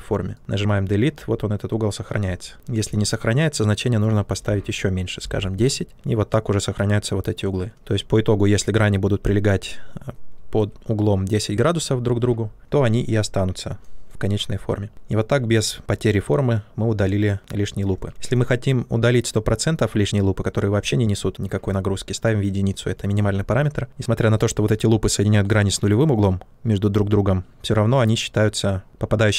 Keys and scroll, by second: 2.0 ctrl+z, 2.8 ctrl+z, 4.9-5.8 typing, 17.9 ctrl+z.